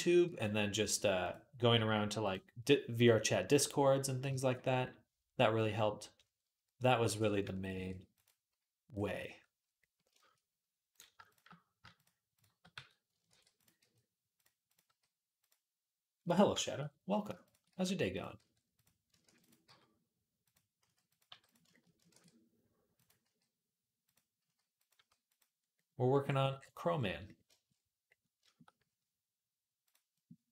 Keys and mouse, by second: 0.1 g, 1.5 s, 4.1 shift+click, 4.3 right click, 4.7-11.0 middle drag, 7.5 ctrl+r, 11.1 shift+click, 12.6 f, 13.1 ctrl+r, 13.6 g, 14.5 click, 14.7 g, 17.2 shift+click, 17.5 g, 18.2 r, 19.1 ctrl+r, 19.5 g, 20.6 s, 21.1 g, 21.9 ctrl+r, 22.6-29.7 middle drag, 23.0 g, 24.2 s, 24.8 g, 29.7-30.5 drag.